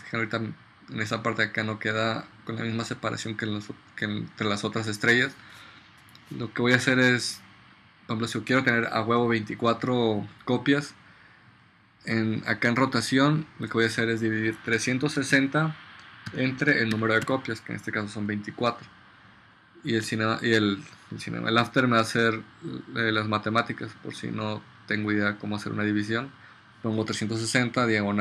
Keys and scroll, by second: 14.7-17.3 typing.